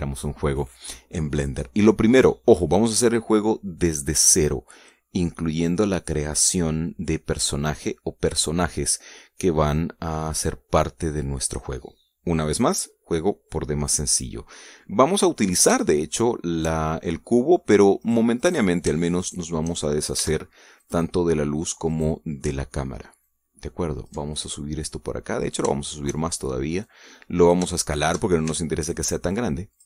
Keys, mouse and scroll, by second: 14.4-16.3 middle drag, 16.5 shift+middle click, 18.7 right click, 19.0 right click, 19.9 shift+right click, 21.5 click, 22.6 right click, 23.9-25.0 ctrl+drag, 25.0-25.9 ctrl+middle drag, 26.0-26.4 scroll up 3, 26.4 shift+middle click, 27.5 click, 28.4-28.9 shift+middle drag, 29.2 shift+s.